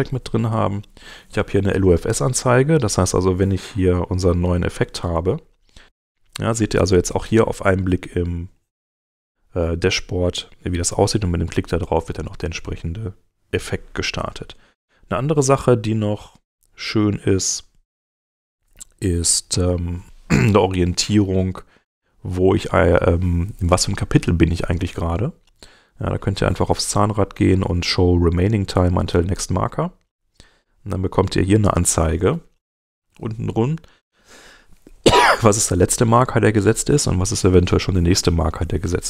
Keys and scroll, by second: 5.0 space.